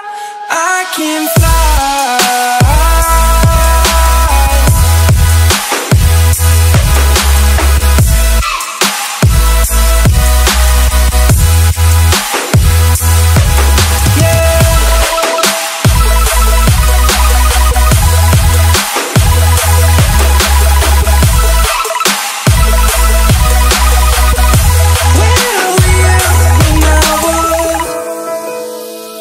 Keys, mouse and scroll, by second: 2.8 right click, 3.8-7.5 drag, 9.0 F10, 10.0 click, 10.7 right click, 11.9 click, 12.6 KP_1, 12.9 KP_0, 13.4 click, 14.6 KP_6, 15.9 Return, 16.6 right click, 17.4 scroll down 1, 17.5 right click, 18.5 click, 18.9 F10, 19.8 click, 24.9 F10, 25.4 F10, 25.7 click, 26.7 KP_1, 26.7 KP_0, 26.9 click, 27.0 F10, 27.9-29.2 drag.